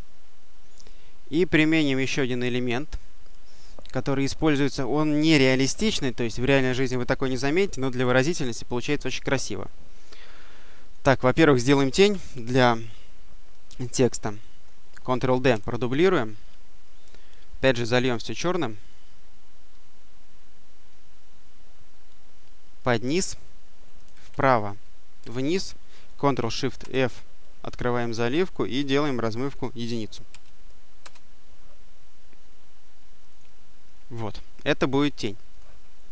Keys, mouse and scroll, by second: 2.0 click, 10.7 click, 15.4 d, 17.3-19.2 drag, 19.6-21.2 drag, 22.6 click, 24.2 Right, 25.0 Down, 26.6 ctrl+shift+f, 28.9 click, 30.1 1, 30.8 Return, 33.2 click, 35.4 click.